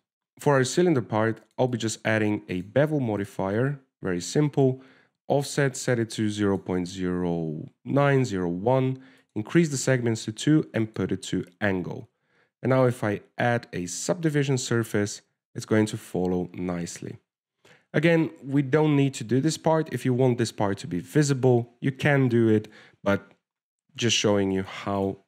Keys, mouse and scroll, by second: 0.0 shift+middle click, 0.3 shift+middle click, 0.3 right click, 0.3 scroll up 4, 2.7 click, 3.0 click, 3.8 click, 5.0-5.9 scroll up 2, 6.0 shift+click, 10.5 click, 12.1 click, 14.1 click, 15.8-17.1 scroll down 6, 17.1 scroll down 4, 17.3 click.